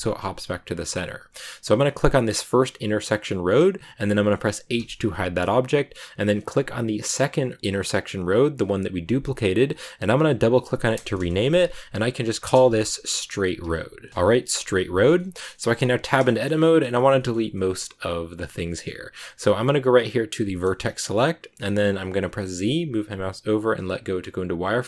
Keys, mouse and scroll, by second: 2.2 click, 4.7 h, 7.9 click, 10.2 click, 10.3 click, 11.0 BackSpace, 11.1 BackSpace, 14.9 scroll down 1, 15.1 middle click, 15.3 scroll up 2, 15.4 middle click, 15.7 Tab, 15.9 scroll up 1, 15.9 shift+middle click, 16.4-17.1 scroll up 1, 17.1 shift+middle click, 17.2 scroll up 2, 17.4-20.5 middle drag, 20.5 click, 21.5-22.5 middle drag, 22.5 z.